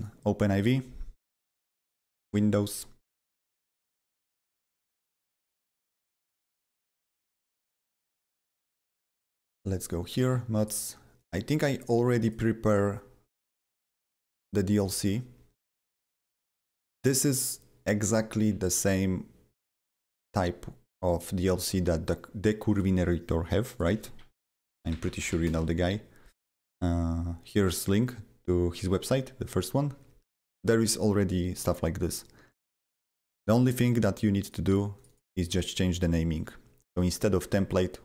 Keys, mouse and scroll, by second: 0.1 click, 2.1 click, 10.0 click, 10.7 click, 11.2 click, 11.7 click, 12.2 click, 13.8 click, 14.3 click, 14.7 click, 15.6 click, 16.3 click, 16.8 click, 23.7 click, 23.8 click, 23.9-25.8 typing, 32.5 click, 34.4 click, 34.9 click, 35.6 double click.